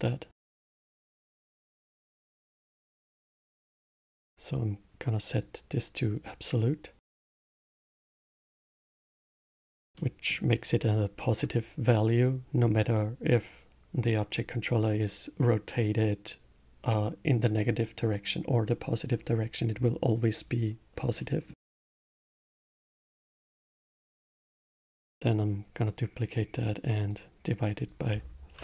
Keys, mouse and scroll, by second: 4.5 click, 6.1-8.6 drag, 9.9-13.0 middle drag, 20.3 click, 21.1-22.2 middle drag, 23.5 shift+a, 24.1 click, 25.0 shift+d, 27.0-28.6 drag.